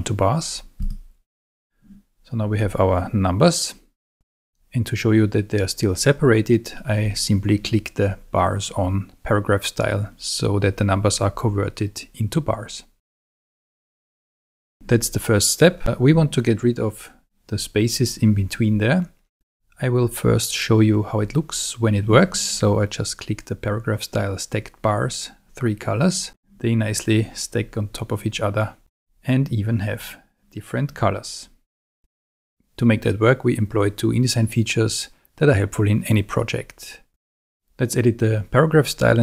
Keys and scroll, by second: 14.3 Escape.